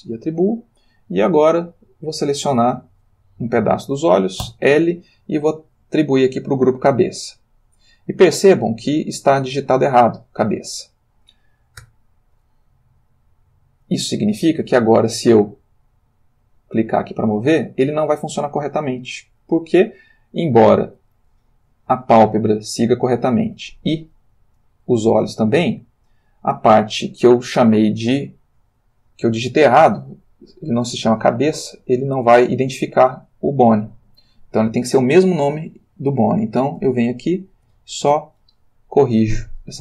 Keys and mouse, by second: 0.3 click, 1.7 click, 4.5 l, 5.9 click, 7.6 click, 11.8 Tab, 13.1 click, 14.8 r, 20.6 Escape, 21.9 click, 22.2 g, 23.2 Escape, 23.9 click, 24.2 g, 25.6 Escape, 28.1 click, 31.3 click, 32.9 click, 34.0 click, 36.7 BackSpace, 37.6 e, 38.0 Return.